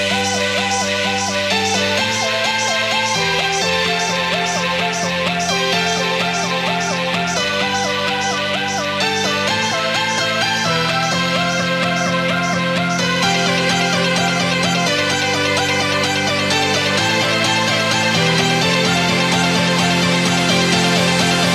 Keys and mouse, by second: 0.1 ctrl+-, 0.5 space, 0.6 click, 0.8 space, 1.1 click, 1.4 space, 2.2-8.9 drag, 10.3 alt+click, 17.4 click.